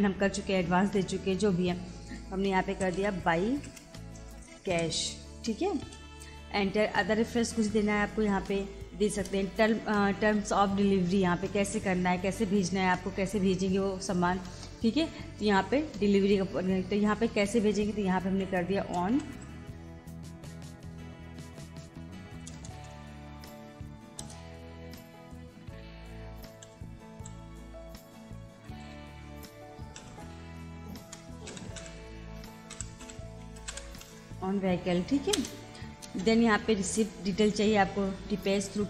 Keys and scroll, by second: 2.8 b, 3.3 space, 3.7 shift+c, 4.1 a, 5.8 Return, 9.1 Return, 18.3 o, 19.3 space, 22.4 BackSpace, 24.2 Return, 26.6 shift+o, 27.1 w, 28.6 n, 28.8 space, 30.0 shift+e, 31.0 BackSpace, 31.5 v, 32.8 h, 33.0 i, 33.5 c, 35.4 Return.